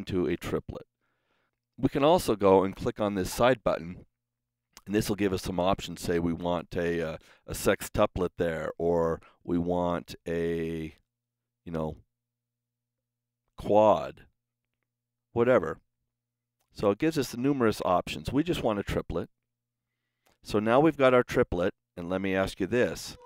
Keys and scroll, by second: 1.2 super+z, 9.2 super+z, 15.0 super+z.